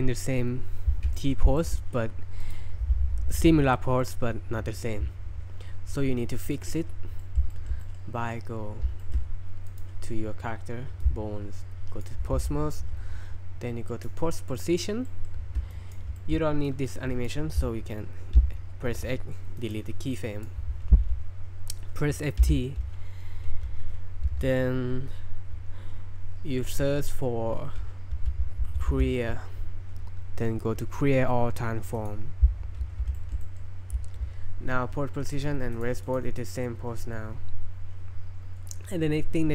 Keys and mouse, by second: 1.1 middle click, 1.6 shift+middle drag, 2.4 right click, 7.2 shift+middle drag, 7.5 shift+middle click, 7.8 middle click, 9.0 shift+middle click, 9.7 click, 11.2 click, 14.1-15.1 drag, 15.1 middle click, 15.7 drag, 16.2 shift+middle click, 16.7 click, 18.4 x, 20.2 click, 22.4 F3, 33.2 shift+middle click, 33.4 middle click, 35.8-36.1 drag, 36.4 click, 38.7-39.5 middle drag.